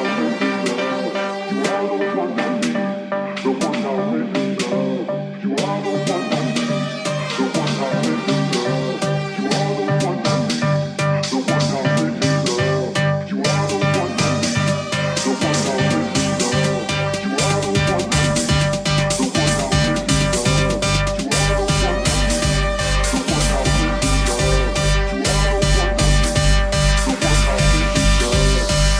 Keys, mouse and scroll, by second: 23.4-28.9 drag.